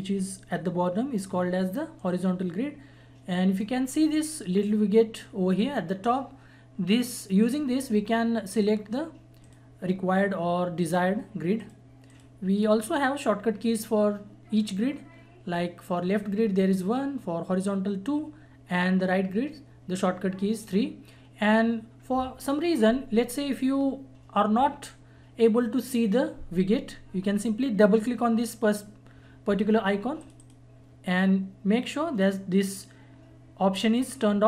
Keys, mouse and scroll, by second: 2.0-6.0 drag, 12.7 click, 30.2 click.